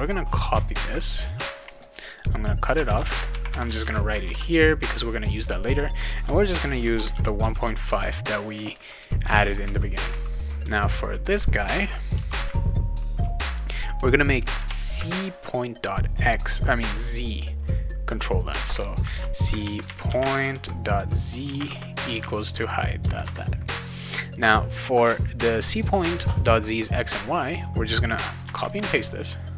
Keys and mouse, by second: 0.7 ctrl+c, 1.2 ctrl+x, 2.0 click, 2.7 Return, 3.0 Return, 3.8 ctrl+v, 4.2 ctrl+s, 5.3 click, 6.6-7.9 typing, 12.1 ;, 19.0-21.6 typing, 22.2 ctrl+s, 23.0 Return, 27.6 click, 28.6 ctrl+c, 29.1 click.